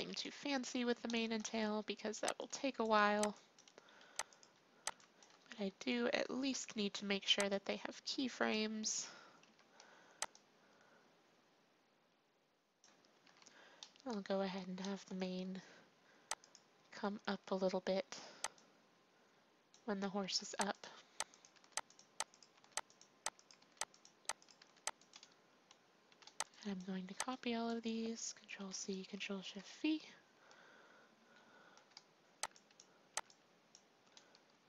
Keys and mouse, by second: 2.1 b, 3.1 b, 4.3-6.2 drag, 4.8 b, 6.6 i, 7.5 click, 9.4 i, 10.3-12.1 drag, 13.2 i, 13.7 click, 16.4-18.0 drag, 18.5-21.3 drag, 20.2 r, 21.5 r, 22.5 r, 23.5 r, 24.5 r, 26.0 a, 26.4 b, 27.0 b, 28.5 ctrl+c, 29.3 ctrl+shift+v, 32.4 b, 33.1 b.